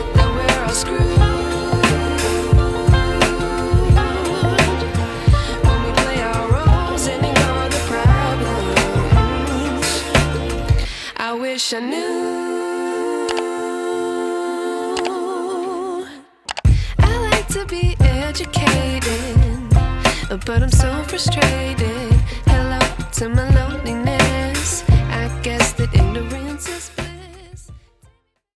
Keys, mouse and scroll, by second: 2.3 ctrl+t, 3.4-6.2 alt+shift+drag, 10.4 Left, 11.3-17.1 drag, 17.9 space, 18.4-19.4 ctrl+click, 19.7-20.9 ctrl+click.